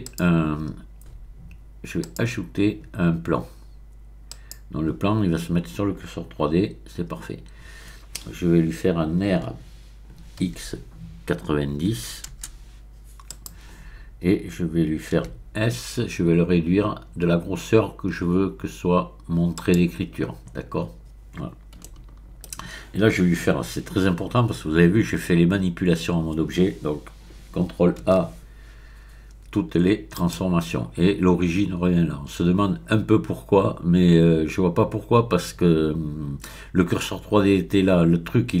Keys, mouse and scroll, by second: 0.0 click, 2.0 click, 4.3 click, 9.4 r, 10.4 x, 11.9 KP_9, 12.4 KP_0, 13.3 click, 15.2 s, 19.5 click, 20.5-21.7 scroll up 1, 21.8 shift+middle click, 28.1 ctrl+a, 30.1 click.